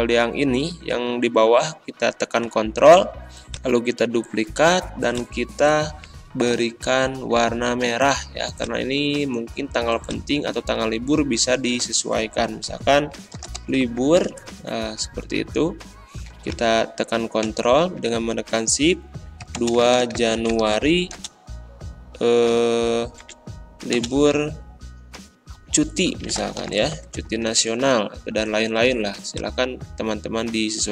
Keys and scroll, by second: 13.1-14.7 typing, 17.4 shift+Return, 19.4-21.3 typing, 23.2 BackSpace, 23.9 space, 26.0-27.1 typing, 27.4 ctrl+a.